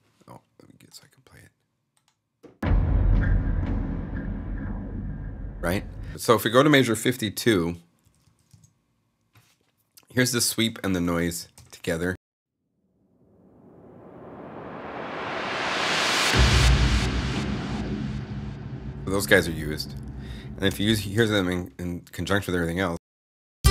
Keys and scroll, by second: 6.1 0, 7.6-8.6 typing, 10.9 super+Up, 12.0 super+Home, 20.5 0, 21.0 s, 22.8 Return.